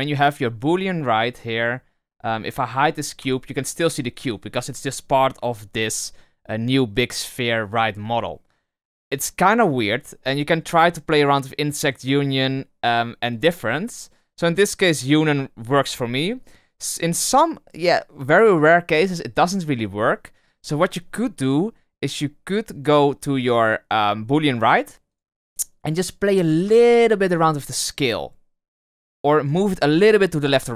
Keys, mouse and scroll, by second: 0.9 right click, 1.6 right click, 3.1 h, 4.7 right click, 10.4 click, 11.8 click, 13.9 click, 15.3 click, 16.0 middle click, 17.0 scroll down 1, 17.1-18.6 scroll up 1, 24.4 click, 25.0 click, 25.6 right click, 27.1 s.